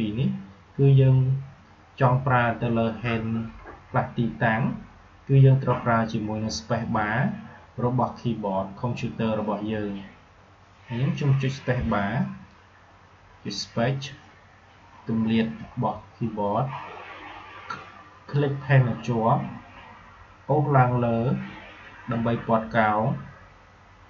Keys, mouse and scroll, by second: 11.8 space, 14.1 space, 15.5 space, 18.3-24.0 drag.